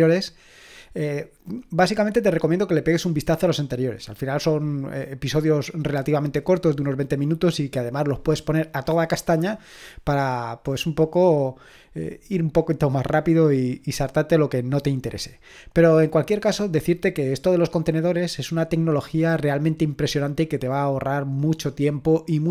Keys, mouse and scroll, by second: 2.0-12.7 scroll up 1, 12.7-18.0 scroll up 1, 18.0-22.5 scroll up 1.